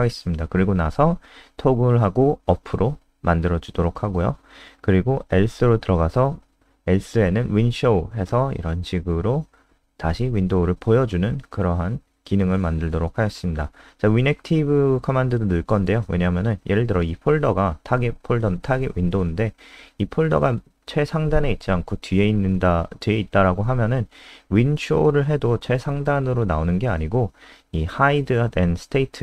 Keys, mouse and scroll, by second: 0.0-11.7 typing, 8.7 Return, 13.9 click, 16.9 ctrl+alt+space.